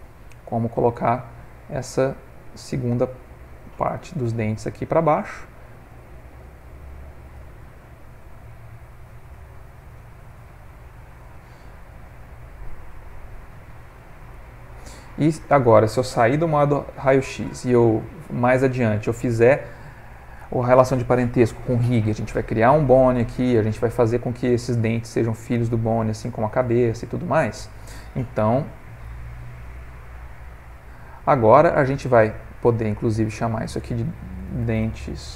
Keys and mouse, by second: 0.0 g, 1.6 s, 4.3 g, 6.0 click, 6.8 click, 7.2 g, 9.8 click, 10.3 g, 11.5 middle click, 14.3 ctrl+middle click, 17.8 middle click, 18.5 ctrl+middle click, 19.0 middle click, 19.4 middle click, 23.8 middle click, 24.8 middle click, 25.2 middle click, 26.0 middle click, 26.8 ctrl+middle click, 27.1 middle click, 29.0 z, 30.6 middle click, 33.2 click, 33.4 click.